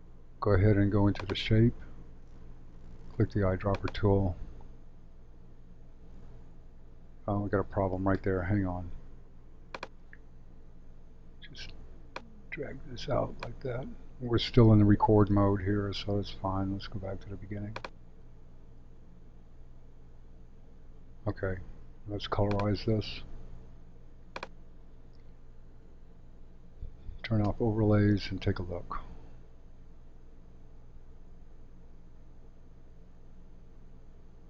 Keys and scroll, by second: 20.7 space, 26.1 super+/, 27.4 space.